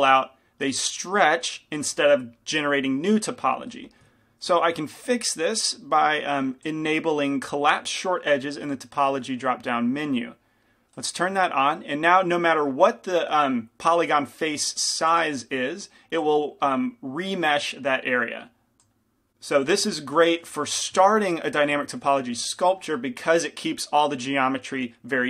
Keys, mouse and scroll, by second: 4.7 ctrl+z, 11.8-15.0 drag, 15.0 f, 19.6-21.2 middle drag, 20.0 ctrl+z, 20.8 f, 21.2-25.2 drag.